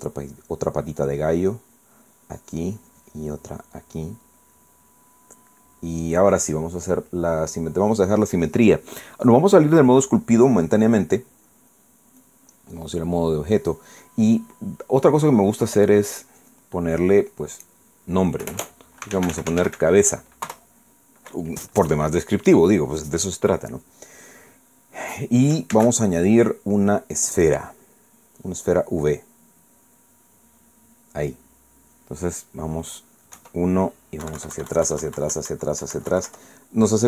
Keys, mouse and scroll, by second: 1.4 middle click, 3.3-4.9 drag, 4.9-7.0 middle drag, 8.3 click, 12.7 click, 13.2 click, 16.3 click, 17.0 click, 19.8-21.1 typing, 21.4 Return, 25.5 scroll up 2, 26.7 shift+a, 31.6 click, 34.3 KP_1, 35.2 KP_Subtract.